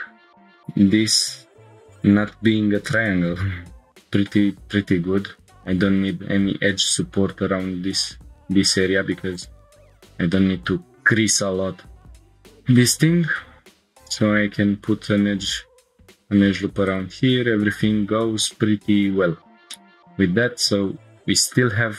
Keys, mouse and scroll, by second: 0.3 click, 1.4 scroll down 1, 1.5 middle click, 4.0 middle click, 4.0 scroll up 1, 4.1 scroll down 1, 5.4 ctrl+r, 12.2 ctrl+r, 17.5 Tab, 18.9 click, 19.4 scroll down 1, 19.7-21.6 middle drag, 21.8 scroll up 1.